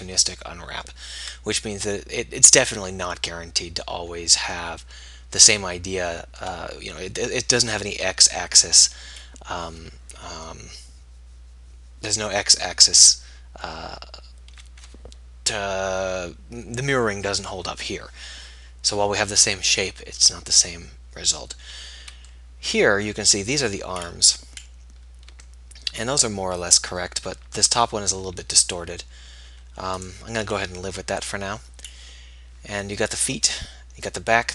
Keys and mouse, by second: 27.9 a.